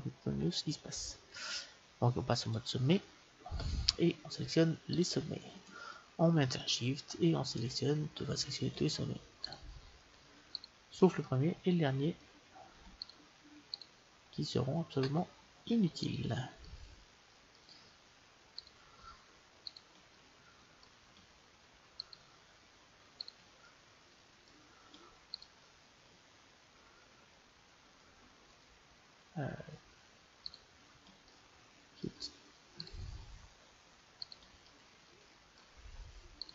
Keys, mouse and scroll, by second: 2.4-4.1 drag, 4.9-6.9 right drag, 5.9 click, 6.9-7.9 middle drag, 9.4-12.4 right drag, 11.2-13.0 middle drag, 13.0-15.6 right drag, 16.0 right click, 16.7-22.1 middle drag, 20.3-21.5 right drag, 22.1-24.8 right drag, 23.6 click, 24.8 click, 25.1 middle click, 25.3-27.3 right drag, 28.5-30.3 drag, 30.5 right click, 31.3-33.7 middle drag, 32.0 right click, 32.8-35.3 right drag, 34.6 click, 34.6 middle click.